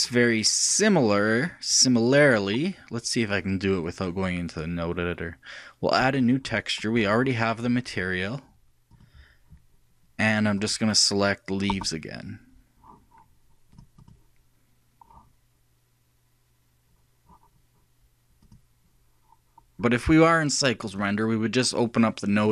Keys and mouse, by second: 1.6-3.2 drag, 3.2-4.7 middle drag, 6.1-10.7 drag, 14.4-15.9 drag, 18.5-19.7 drag, 20.9-22.5 drag.